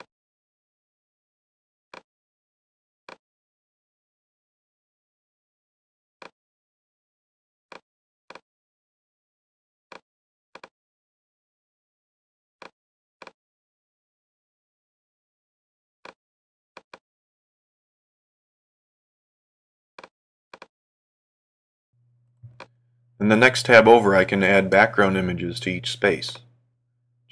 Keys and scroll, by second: 8.5 Up, 10.8 Right, 17.2 Right.